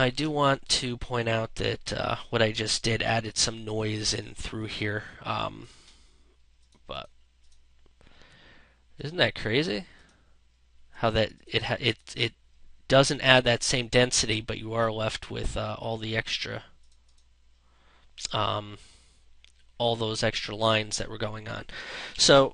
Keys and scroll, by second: 3.9 space, 21.7 ctrl+0.